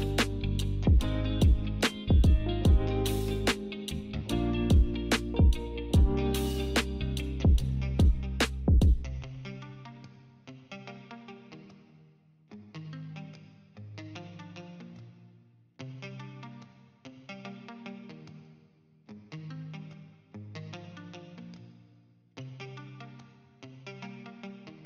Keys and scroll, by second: 3.9 5, 4.0 Return, 5.3-6.2 typing, 11.2-11.9 typing.